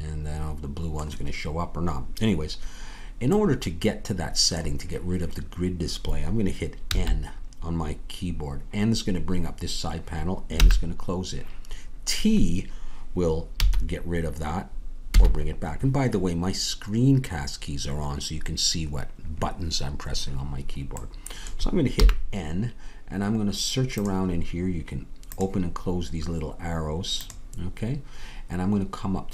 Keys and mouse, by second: 6.9 n, 10.5 n, 15.1 t, 22.0 n.